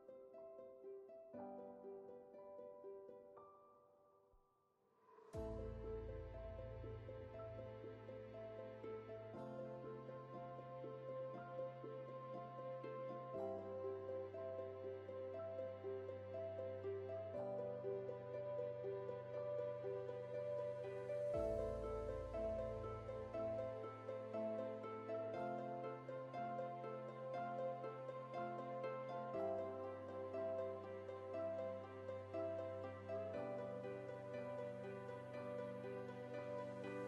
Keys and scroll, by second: 3.5 ctrl+t, 13.9 Return, 33.9 alt+BackSpace.